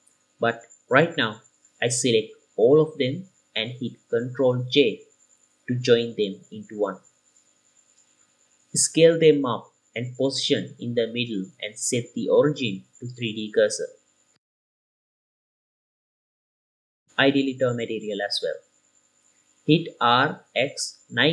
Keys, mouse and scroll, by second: 1.0-1.6 scroll down 3, 1.6-2.5 scroll up 2, 1.9 KP_7, 2.5-3.1 scroll down 2, 3.1-3.7 drag, 5.5 ctrl+j, 7.0 shift+F2, 8.7 s, 10.7 click, 10.9 g, 11.4 middle click, 11.4 scroll down 2, 12.4 g, 12.4 shift+z, 12.5 drag, 12.8 KP_7, 12.9-13.6 scroll down 2, 17.6 click, 18.5 drag, 18.8-19.1 middle drag, 19.3-19.7 drag, 19.7 right click, 19.7 r, 20.5 x.